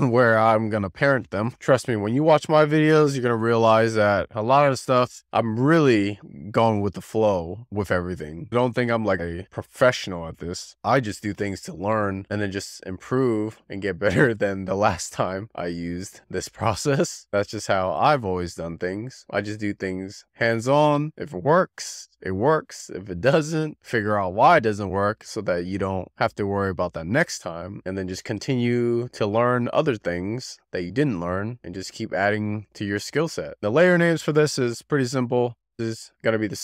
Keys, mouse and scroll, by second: 0.4-0.9 scroll down 4, 34.8-35.3 drag, 35.3-35.7 scroll down 5.